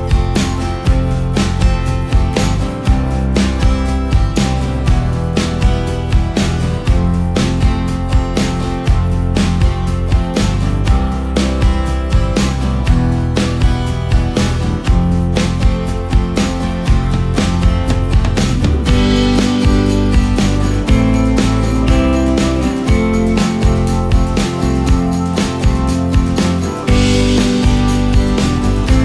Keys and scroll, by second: 4.2 Delete, 8.2 space, 8.9 ctrl+space, 12.3 ctrl+space, 12.9 ctrl+space.